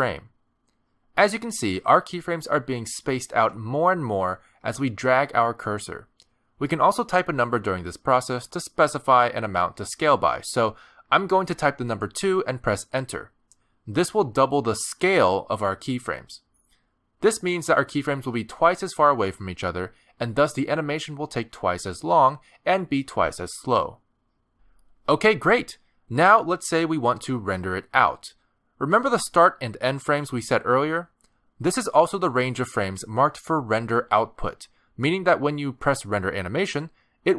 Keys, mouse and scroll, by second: 22.1 space, 31.3 space, 34.7 space, 34.8 click, 35.3 r, 36.9 click.